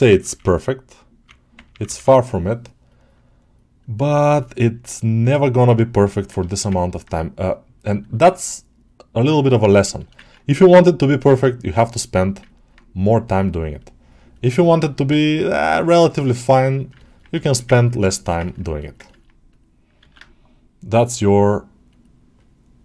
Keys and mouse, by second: 2.7-5.9 drag, 2.7 ], 6.0 ctrl+middle click, 6.4 shift+middle click, 6.6 ctrl+alt+middle click, 7.4 click, 7.9 ctrl+alt+middle click, 9.9 shift+middle click, 10.1 ctrl+alt+middle click, 11.2-12.3 drag, 12.4 ctrl+alt+middle click, 13.6 click, 14.6 ctrl+alt+middle click, 16.1 click, 16.8 ctrl+alt+middle click, 17.3 alt+shift+middle click, 17.6 ctrl+alt+middle click, 18.0 shift+middle click, 18.3 ctrl+alt+middle click, 18.7 alt+middle click, 18.9 ctrl+middle click, 19.4 alt+middle click.